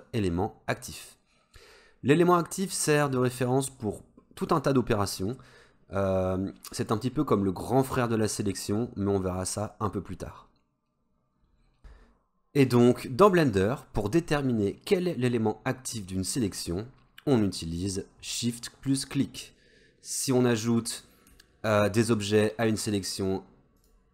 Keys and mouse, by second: 20.5 middle click, 23.8 shift+click.